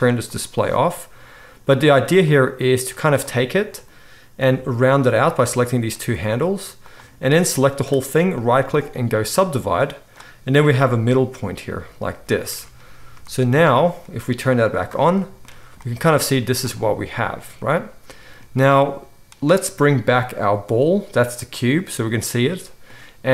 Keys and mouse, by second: 0.3 click, 0.4-2.3 middle drag, 2.3-5.3 drag, 4.4 r, 5.3 middle click, 5.6-6.9 drag, 6.1 r, 6.9 middle click, 7.4-9.3 drag, 8.4-12.3 middle drag, 8.4 right click, 10.6 g, 12.3-12.9 drag, 12.9-14.7 shift+right drag, 14.7 middle click, 14.8-16.4 right drag, 16.4-17.5 drag, 16.4 z, 17.5-19.4 middle drag, 19.4-21.8 drag, 21.7 middle click, 21.7-23.3 right drag.